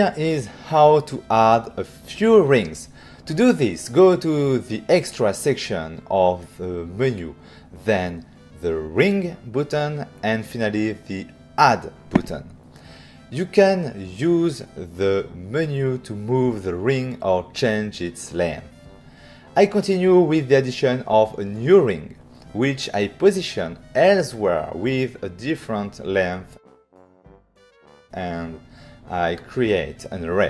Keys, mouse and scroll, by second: 3.5 click, 6.9 click, 8.7 click, 11.4 click, 12.7 click, 14.0 click, 15.7 click, 17.3 click, 17.7 click, 17.9 click, 18.3 click, 19.9 click, 20.7 click, 22.7 click, 24.0 click, 24.7 click, 26.4 click, 26.5 click, 27.1 click, 27.3 click, 27.7 click, 29.5 click, 29.9 click, 30.1 click.